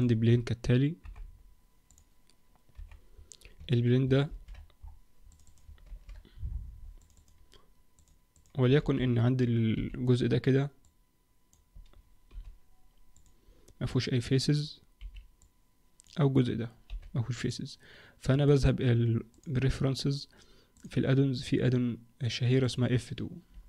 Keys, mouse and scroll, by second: 0.2-1.0 scroll down 1, 1.0-1.5 scroll down 4, 1.0 KP_7, 1.9 click, 2.7 KP_Decimal, 3.6 Tab, 4.3 ctrl+r, 5.9 ctrl+r, 7.9 click, 8.3 click, 8.8 alt+a, 9.7 b, 12.3 x, 15.0 b, 16.9 x, 18.5 click.